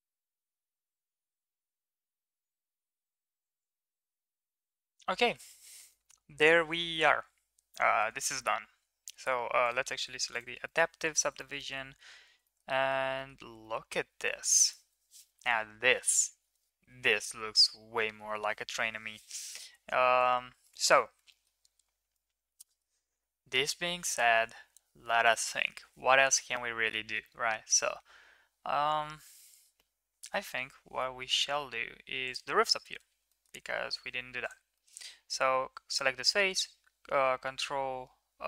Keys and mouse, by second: 0.0 middle click, 0.2 middle click, 0.5 middle click, 0.7 Tab, 0.9 middle click, 1.0 Tab, 1.0 middle click, 1.2 middle click, 1.4 ctrl+r, 2.4 Tab, 2.5 middle click, 2.6 ctrl+s, 2.8 shift+middle click, 3.0 Tab, 3.3 middle click, 3.4 ctrl+r, 3.7 Tab, 3.8 ctrl+s, 3.9-4.6 middle drag, 9.6 right drag, 10.6 middle click, 11.0 ctrl+s, 11.4 middle click, 12.4 middle drag, 12.7 middle drag, 13.1 middle click, 13.6 middle click, 20.6 shift+middle click, 21.3 shift+middle drag, 22.1-22.8 middle drag, 32.9 Tab, 33.3 middle click, 34.0 3, 34.4 click, 34.7 middle drag, 36.3 shift+s.